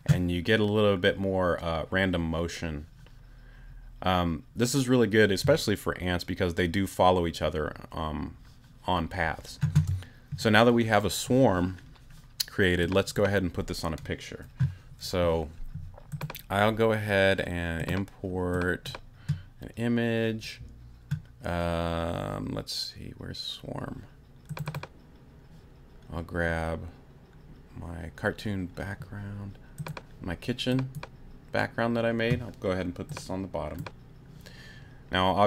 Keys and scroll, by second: 9.7 space.